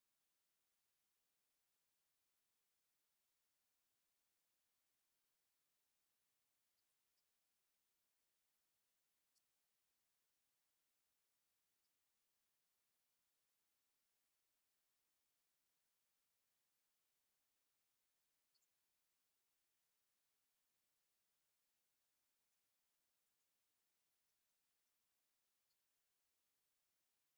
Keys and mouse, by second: 7.1-8.9 drag, 10.4 g, 18.5-27.3 drag.